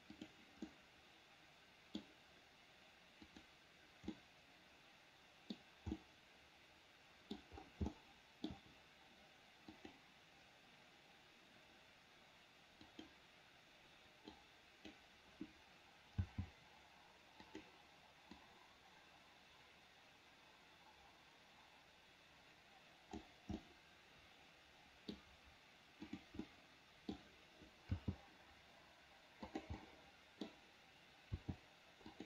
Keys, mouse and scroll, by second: 0.9-2.2 middle drag, 3.5 click, 4.4-5.8 middle drag, 6.2-7.6 middle drag, 8.1 shift+middle click, 10.0 click, 13.1 click, 14.5 click, 16.5 g, 18.6-23.5 drag, 23.8-25.3 middle drag, 26.2 click, 26.6 middle click, 28.2 g, 30.0-31.2 middle drag, 31.6 r.